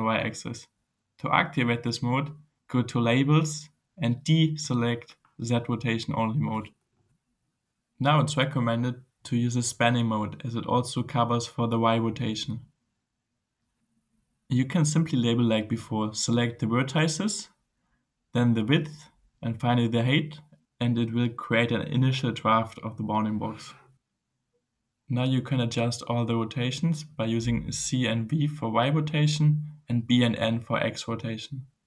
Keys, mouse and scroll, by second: 3.0 click, 6.1 click, 6.9 scroll up 2, 7.9 click, 10.3 click, 14.8 click, 16.8 click, 18.0 click, 19.9 click, 23.8-25.3 typing, 29.7 c, 29.9 c.